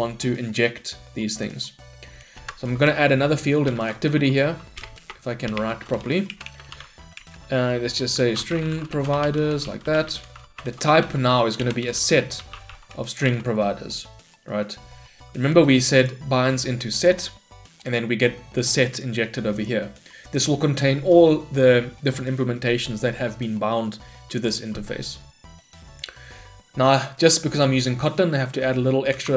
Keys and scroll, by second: 6.4 Return, 11.7 Return.